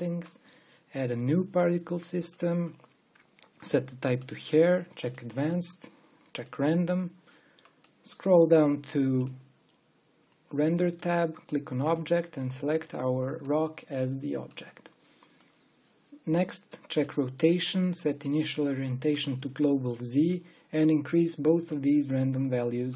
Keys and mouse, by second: 4.3-14.2 drag, 17.1-21.0 drag, 21.0-22.4 middle drag, 22.5 middle click.